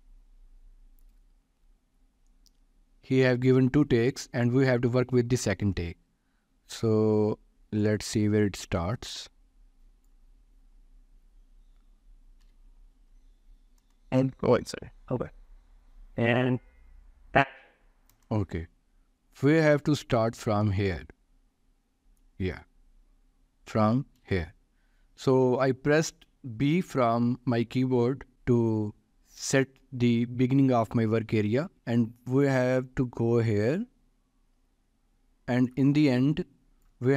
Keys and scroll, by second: 12.9 b, 13.8 space, 24.6 b.